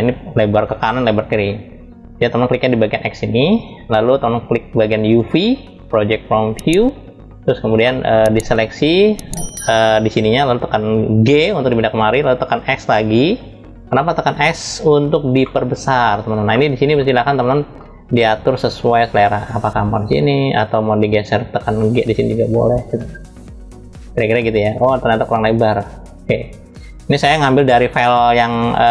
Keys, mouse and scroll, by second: 2.9 click, 4.7-7.4 drag, 7.5 middle click, 7.8 click, 8.2-10.6 drag, 10.8 g, 15.1 middle click, 15.7-16.2 scroll up 1, 16.2 middle click, 16.7-17.1 scroll up 1, 17.1 middle click, 18.9 s, 26.1 click, 28.0-28.9 drag.